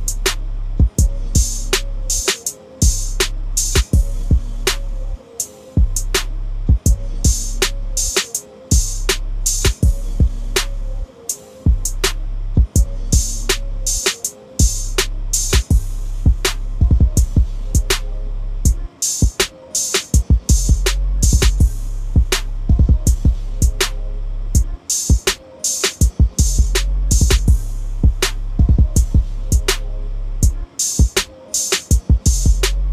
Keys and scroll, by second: 1.4 ctrl+a, 2.5 ctrl+c, 3.8 ctrl+n, 4.2 Return, 5.6 ctrl+v, 24.4-24.9 typing, 29.4 ctrl+a, 29.7 ctrl+c, 31.3 ctrl+v.